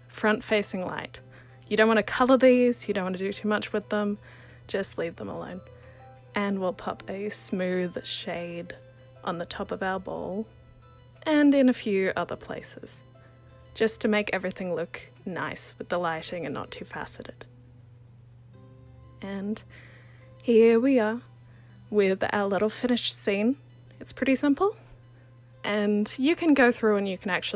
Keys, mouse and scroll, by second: 2.8 click, 4.9 click, 6.2-8.5 drag, 9.2-11.7 alt+drag, 12.4 click, 14.0-16.5 drag, 17.0 click, 18.6-20.5 drag, 20.8-23.3 alt+drag.